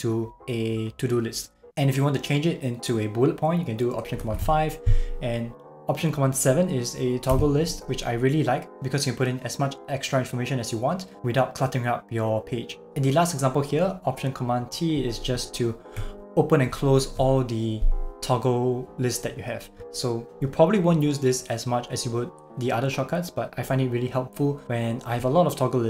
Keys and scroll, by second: 4.3 alt+super+5, 7.3 alt+super+7, 16.7 alt+super+t.